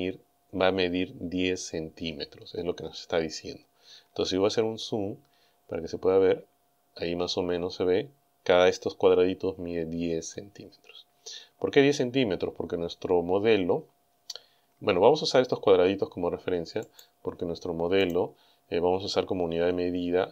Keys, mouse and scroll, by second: 4.4-5.1 scroll up 4, 5.7-6.1 scroll up 4, 6.2 scroll down 2, 9.6-10.1 scroll up 2, 10.7 scroll up 2, 11.4 scroll down 2, 16.9 click, 18.1 click, 18.9-19.9 scroll up 4.